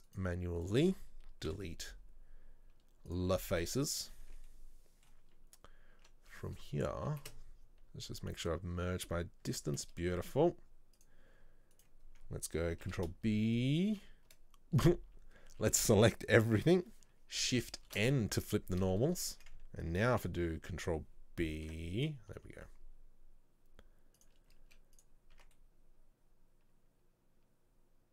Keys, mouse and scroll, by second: 0.1 shift+right click, 0.7 shift+right click, 3.2 Delete, 3.4 scroll down 1, 4.1 z, 4.2 scroll down 1, 4.3 Tab, 4.5-6.0 middle drag, 6.0 Tab, 7.1 a, 10.4 click, 11.0 click, 11.8 alt+right click, 12.1-12.9 scroll up 1, 12.9 ctrl+b, 15.1-15.6 scroll down 2, 15.6 a, 17.9 shift+n, 19.2 alt+right click, 21.6 ctrl+b, 25.1 z, 25.4 Tab, 25.7-28.1 middle drag.